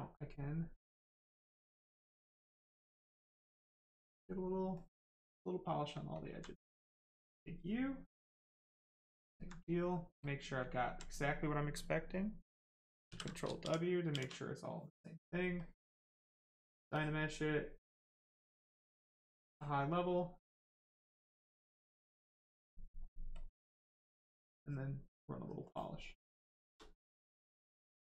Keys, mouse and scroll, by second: 1.7 click, 3.6 right click, 6.5 right click, 8.3 click, 9.2 alt+right click, 10.2 click, 10.6 alt+right click, 11.0 right click, 11.0 right click, 13.0 ctrl+w, 13.6 shift+f, 14.0 shift+f, 14.3 right click, 15.5 click, 18.3 click, 21.4 click, 24.6 click, 26.0 right click, 26.5 shift+right click, 26.8 alt+right click, 27.8 alt+click.